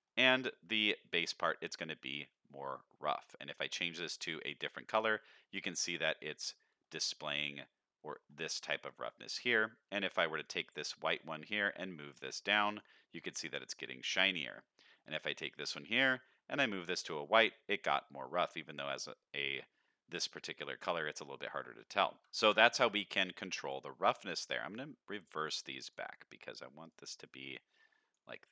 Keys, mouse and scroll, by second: 1.7-2.0 middle drag, 2.3 middle click, 3.4 click, 5.1-5.6 scroll up 2, 5.4 middle click, 6.8 middle click, 8.0 middle click, 10.3 click, 11.1 drag, 15.0 click, 15.5 click, 17.2 middle click, 17.7-18.5 scroll up 1, 18.5 middle click, 18.5 scroll up 1, 21.1 middle click, 21.6 scroll down 1, 22.2 click, 22.3 ctrl+shift+click, 24.6 click, 25.8 drag, 26.3 click, 26.8 click, 28.3 click.